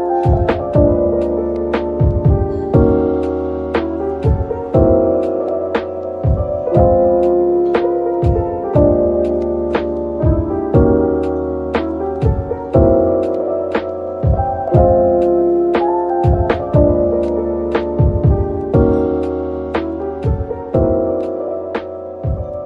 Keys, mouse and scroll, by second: 0.7 typing, 3.0-3.6 scroll down 1, 4.2-5.3 typing, 8.1 scroll down 1, 9.2-11.8 typing, 18.5 scroll down 1, 19.0-21.3 scroll up 1, 22.3 double click.